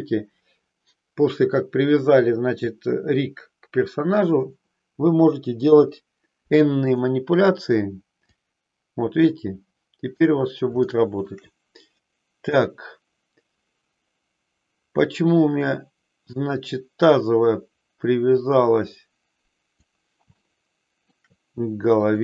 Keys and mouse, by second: 5.6 KP_3, 6.9 click, 8.2-10.1 drag, 10.8 shift+middle click, 12.5-17.1 drag, 18.4-19.8 drag, 20.4 shift+middle click, 22.0-22.2 drag.